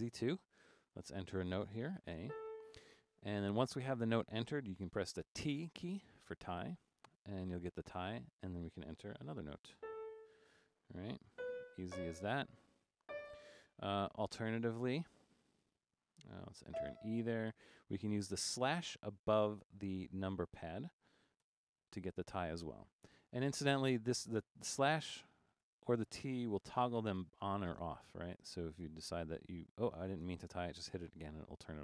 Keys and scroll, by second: 1.0 6, 2.0-2.8 typing, 5.9 t, 9.0-11.9 typing, 13.1 typing, 14.2 typing, 16.5-17.2 typing, 21.5 typing, 25.1-29.2 typing, 30.3 typing.